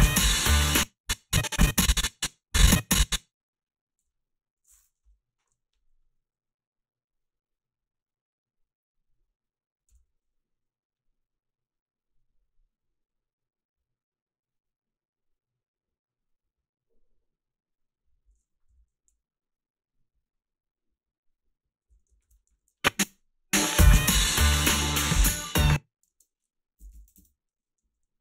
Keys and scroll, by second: 0.5 space, 4.0 g, 9.9 f, 22.2 ctrl+r, 22.5 a, 23.0 space, 23.0 a, 25.5 space, 26.5-27.6 typing.